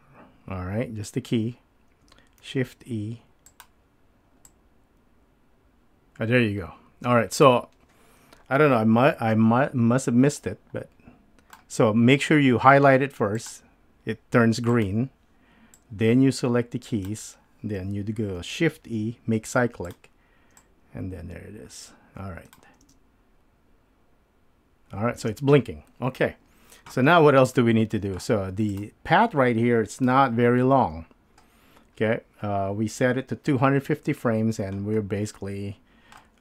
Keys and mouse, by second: 4.0 shift+e, 4.5-7.4 drag, 10.1-11.5 drag, 13.4 click, 14.7 click, 15.7-17.0 drag, 18.8 shift+e, 19.8 click, 20.6-22.6 drag, 23.0 space, 25.7 space, 27.6-28.2 drag, 30.1 KP_7, 35.4 middle click.